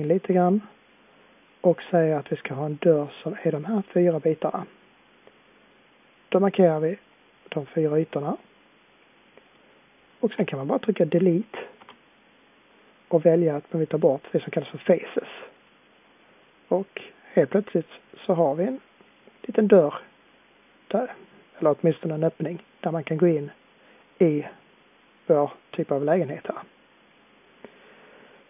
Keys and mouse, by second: 8.8-11.7 middle drag, 11.7 Delete, 16.0-18.1 middle drag, 21.3-28.4 middle drag.